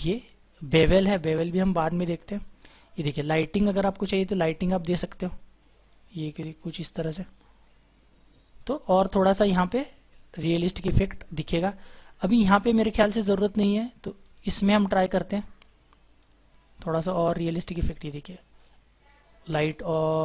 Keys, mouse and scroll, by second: 14.7 double click.